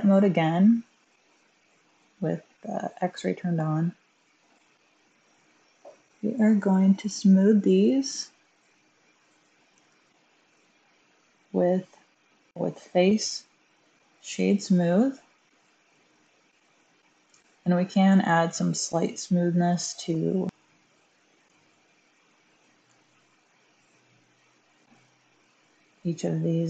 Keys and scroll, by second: 3.0 typing, 9.0-9.6 typing, 21.3 1, 22.7 1.